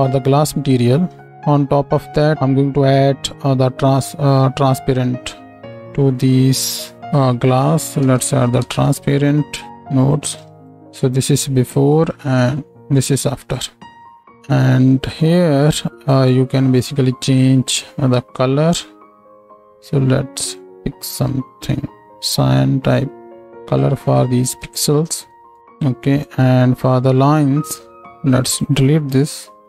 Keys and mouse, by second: 1.2 shift+a, 2.7 right click, 2.7 d, 5.7-10.1 shift+middle drag, 6.2-10.7 drag, 6.2-10.1 right drag, 10.7 m, 12.0 middle click, 12.5 m, 14.2-15.3 middle drag, 15.6 middle click, 19.3 middle click, 25.2-29.6 drag, 26.1-28.2 middle drag, 26.1-28.2 right drag, 28.5 middle click, 28.5 right click, 29.2 x.